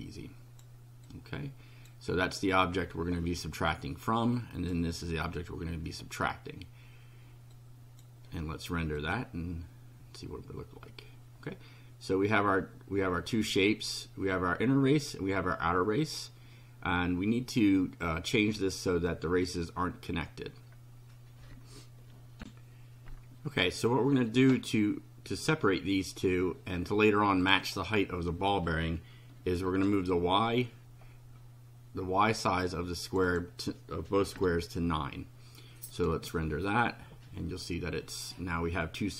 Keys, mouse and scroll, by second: 1.1 click, 3.7 click, 7.5 click, 9.0 click, 22.4 ctrl+r, 27.4 click, 29.6 9, 33.1 click, 34.3 KP_9, 35.9 click.